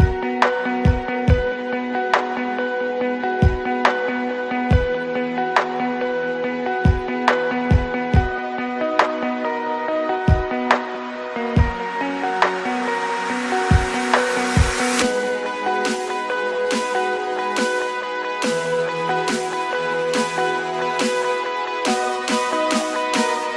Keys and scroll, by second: 7.2 space, 8.8 Escape, 12.7-17.1 typing, 18.1 ctrl+z, 19.3 space, 20.1 space, 21.5 n.